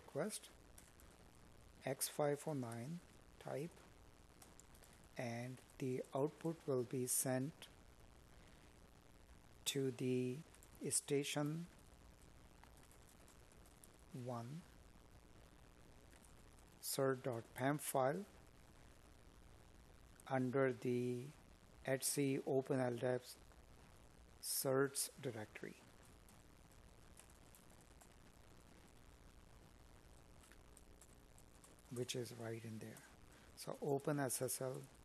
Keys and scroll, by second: 19.1 space, 23.1 ctrl+c, 26.9 space, 28.1 space, 29.1 space, 32.0 space, 33.2 space.